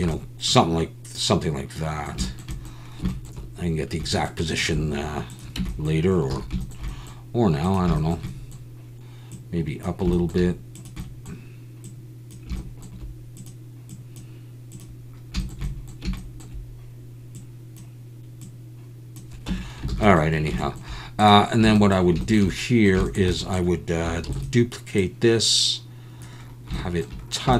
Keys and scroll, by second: 5.6 Tab, 6.3 alt+a, 19.5 Tab, 19.9 alt+a, 24.3 shift+d.